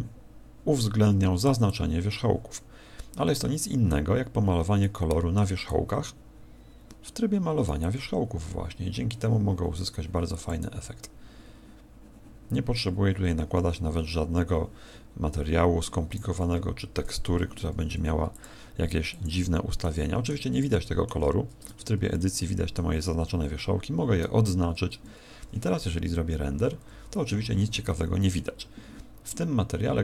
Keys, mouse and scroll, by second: 1.6 click, 3.8 click, 5.0 middle click, 5.6 click, 6.6 click, 7.8 click, 10.6 click, 16.8 Escape, 17.4 Escape, 19.2 click, 19.8 middle click, 20.6 middle click, 21.6 Tab, 22.1 middle click, 23.5 a, 24.6 Tab.